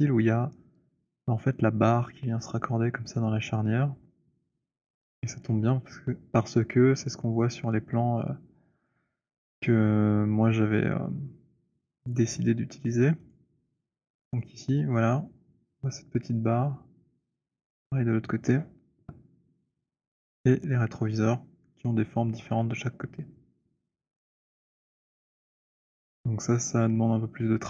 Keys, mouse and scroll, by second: 7.3 click, 9.0 click, 12.2 click, 13.7 click, 27.5 click.